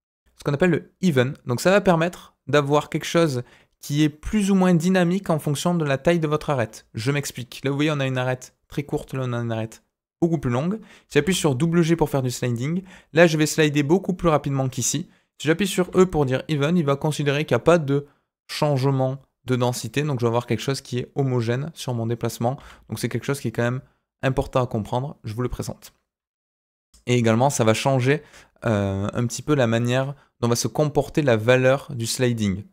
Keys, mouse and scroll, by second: 11.0 g.